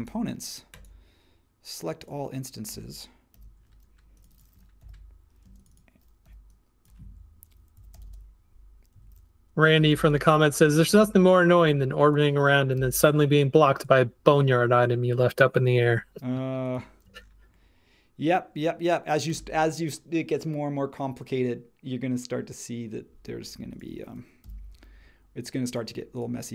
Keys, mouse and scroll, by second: 3.3 super+g, 4.8 p, 5.4 space, 6.2 p, 7.5-12.7 typing, 17.0 space, 24.4 b.